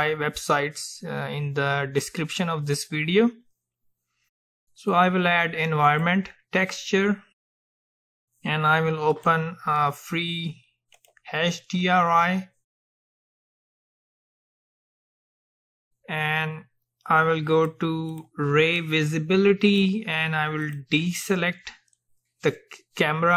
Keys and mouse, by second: 9.2-14.6 drag, 17.6-23.3 drag.